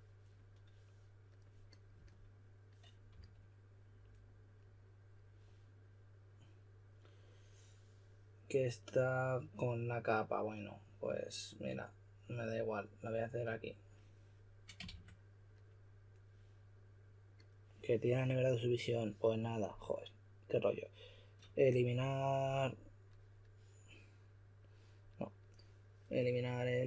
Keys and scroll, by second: 3.1 s, 14.8 shift+s.